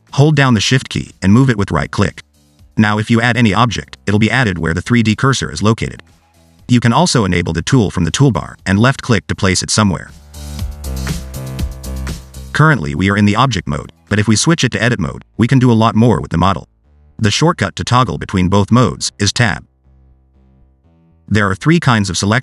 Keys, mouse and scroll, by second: 2.4 shift+right click, 2.9 shift+right click, 3.4 shift+right click, 4.4 shift+a, 8.4 click, 9.4 click, 12.4 click, 14.2 click, 18.4 Tab, 18.8 Tab.